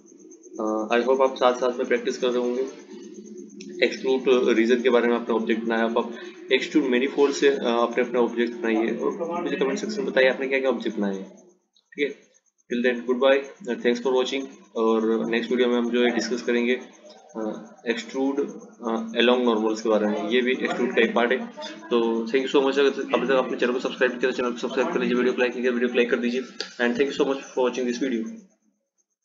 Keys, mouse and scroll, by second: 17.7-20.9 drag.